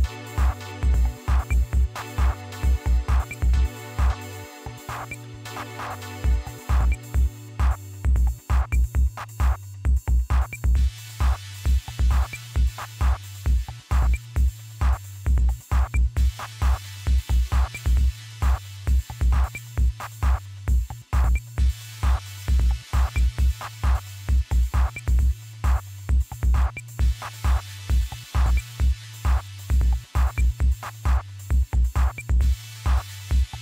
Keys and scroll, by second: 0.4 Left, 0.6 Left, 1.7 Delete, 2.1-4.6 typing, 5.2 Left, 5.5 Left, 5.9 Left, 6.5 Delete, 7.0-9.3 typing, 9.5 Delete, 10.4-11.3 typing, 17.5 Left, 17.7 Left, 19.3 5, 21.2 Left, 21.7 Delete, 21.8-22.4 typing, 25.3 Left, 25.9-26.7 typing.